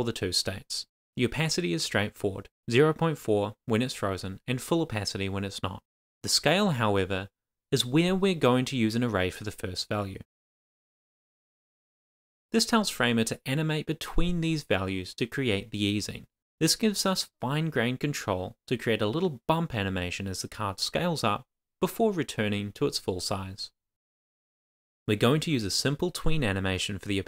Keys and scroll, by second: 5.8 Return, 6.1 shift+;, 6.7 Tab, 7.0 shift+;, 8.8 shift+/, 9.4 shift+space, 9.8 Left, 13.3 super+s, 23.9 Return, 24.4-25.0 typing, 24.7 Return, 25.4 Right, 25.7 Return, 26.0 shift+;, 26.5 shift+o, 26.7 Right, 27.0 Return.